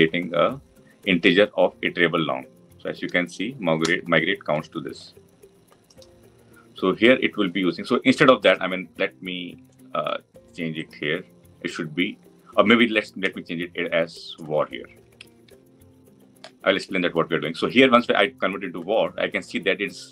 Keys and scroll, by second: 0.0 alt+Return.